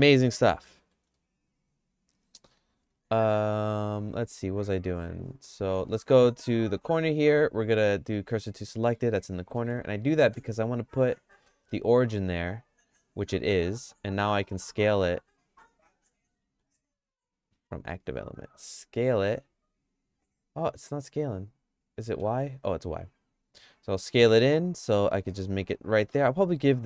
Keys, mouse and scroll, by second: 0.7 middle click, 1.3-2.9 shift+middle drag, 3.1 click, 3.6 click, 5.7 1, 7.2 q, 8.1 middle click, 8.5-9.6 shift+middle drag, 9.7 Tab, 10.3 q, 14.3 s, 19.1 s.